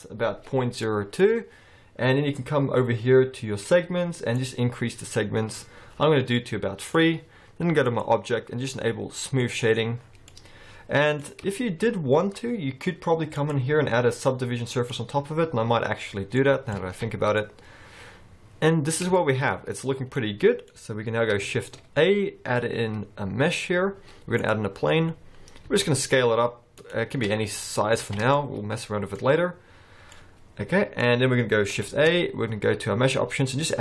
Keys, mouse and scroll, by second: 0.6-1.3 scroll down 3, 0.9 middle click, 1.3-3.0 scroll up 1, 3.0-3.7 scroll up 1, 4.4 click, 5.0 click, 6.4 middle click, 7.9 click, 10.0-10.7 scroll down 7, 10.3 middle click, 11.2-13.2 scroll up 5, 11.6 shift+middle click, 13.2 scroll up 3, 13.4 click, 16.2 scroll down 4, 16.4 middle click, 16.8 alt+a, 17.1-18.0 scroll down 2, 17.4 middle click, 19.2 shift+middle click, 20.0 scroll down 1, 20.2 middle click, 20.8-21.5 scroll up 3, 21.6 shift+a, 24.8-25.7 scroll down 7, 25.7 s, 27.3-27.6 scroll down 2, 27.6 middle click, 28.1 alt+a, 28.4 scroll up 1, 28.4 middle click, 29.2-29.5 scroll up 4, 30.2 middle click, 31.1-31.4 scroll up 2, 31.9 shift+a.